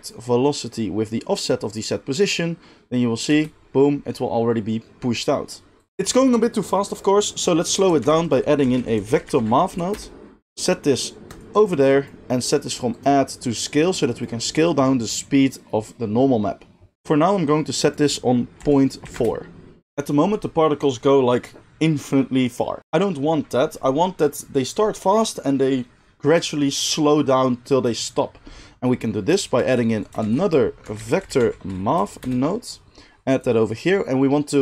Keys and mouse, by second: 3.2 space, 5.9 space, 8.0 shift+a, 11.4-11.9 middle drag, 11.9-12.9 drag, 14.2-33.4 drag, 30.2 shift+a, 33.4-34.6 middle drag.